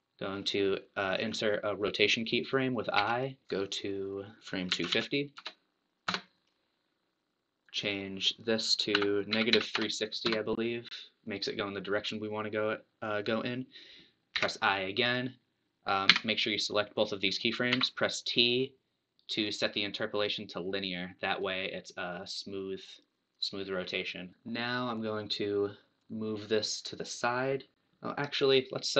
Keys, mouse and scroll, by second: 3.6 click, 4.3-7.1 drag, 7.6-14.3 drag, 16.1 a, 17.7 t, 21.6-24.3 drag, 24.3-26.2 scroll down 1, 24.3 space, 26.2-28.9 drag.